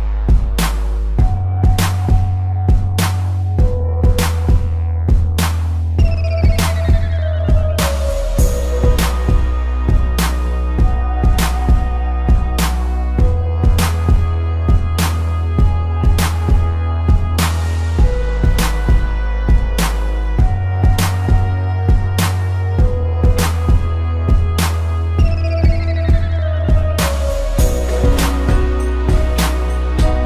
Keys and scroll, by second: 3.9 space, 6.0 a, 9.1 p, 9.3 space, 13.9 a, 14.2 space, 14.6 ctrl+-, 14.9 space, 15.8 ctrl+=, 16.1 p, 16.3 space, 19.0 space, 20.8 space, 23.6 space, 24.8 ctrl+-, 25.5 ctrl+=, 26.1 ctrl+=, 26.2 space, 28.1 space, 29.4 ctrl+-.